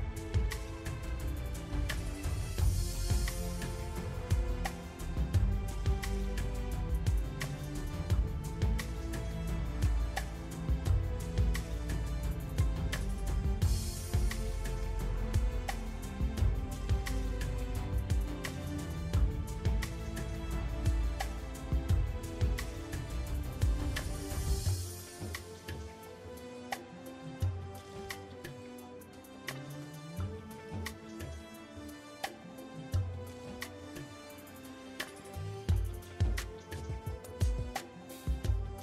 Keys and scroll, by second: 4.1 l, 5.6 KP_3, 6.6 r, 10.6 KP_7, 14.1 Tab, 20.9 Tab, 22.1 KP_3, 23.9 l, 24.8 l, 25.3 KP_3, 31.0 Tab, 33.7 KP_7.